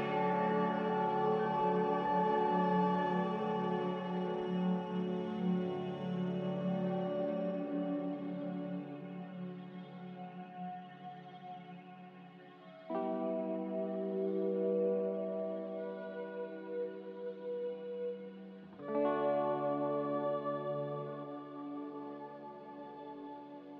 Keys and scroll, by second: 11.4 Delete, 18.9 ctrl+c, 22.0-22.7 typing.